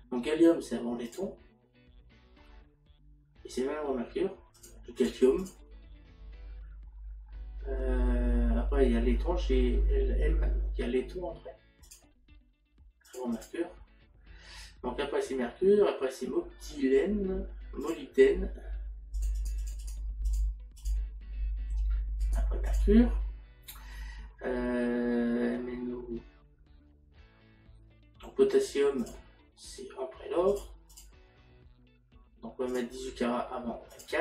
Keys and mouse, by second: 1.1 click, 11.9 click, 17.9 click, 19.2 click, 22.2 click, 29.0 click, 30.5 click, 33.7 click.